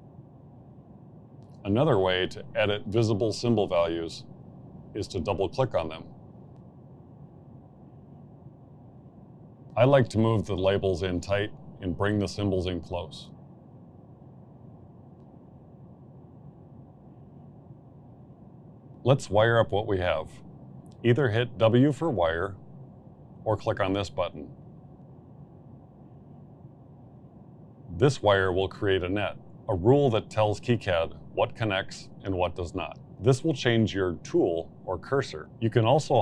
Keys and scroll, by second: 0.2 Delete, 10.1 m, 11.3 m, 12.7 m, 13.6 m, 14.7 m, 17.9 m, 19.0 ctrl+z.